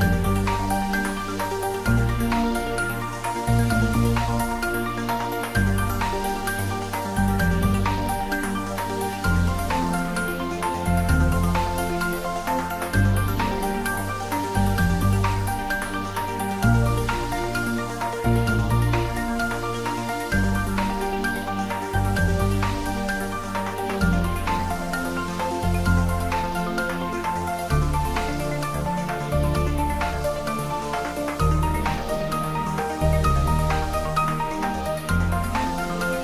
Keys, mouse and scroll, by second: 4.1 shift+click, 9.0 shift+click, 11.9 shift+click, 13.6 ctrl+z, 17.7 shift+click, 20.4-20.8 scroll up 1, 22.6-25.0 drag, 27.4 shift+click, 29.3 scroll down 1, 30.1-32.8 middle drag, 32.8 shift+click.